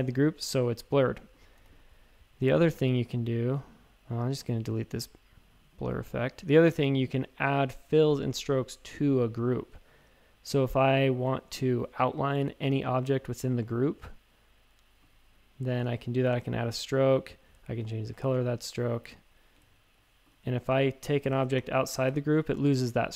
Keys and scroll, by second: 1.6 v, 19.6 shift+super+a, 21.1 super+x, 21.3 shift+super+a, 21.6 super+f.